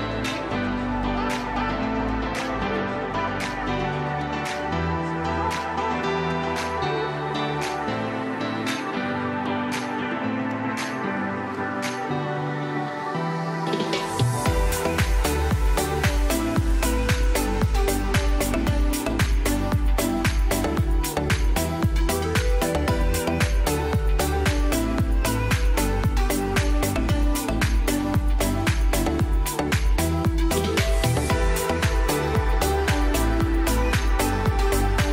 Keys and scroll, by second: 0.3 space, 1.0 Delete, 2.4 F3, 3.8 F2, 4.2 ctrl+z, 4.4 Escape, 5.2 shift+F2, 5.4 F3, 12.0 F4, 12.4 Escape, 14.0 c, 14.4 shift+F2, 14.8 F3, 15.0 Escape, 16.0 shift+Page_Up, 20.1 shift+Page_Down, 20.6 alt+c, 22.6 F4, 27.0 shift+F2, 27.4 shift+Page_Up, 28.1 F3, 28.5 Escape.